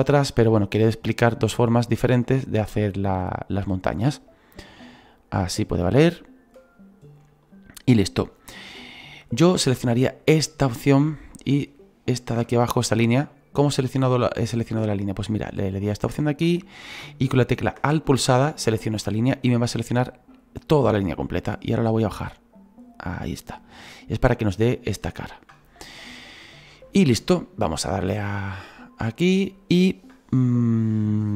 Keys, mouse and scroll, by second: 0.2 right click, 2.2-4.3 drag, 4.3 right click, 5.1-11.9 drag, 11.9 alt+right click, 12.6-14.9 middle drag, 14.9-19.0 right drag, 19.0-21.6 middle drag, 21.6-24.0 drag, 24.0-27.2 middle drag, 27.2-28.5 scroll down 1, 28.5 click, 29.1-30.0 scroll down 2, 30.0-31.3 scroll down 1.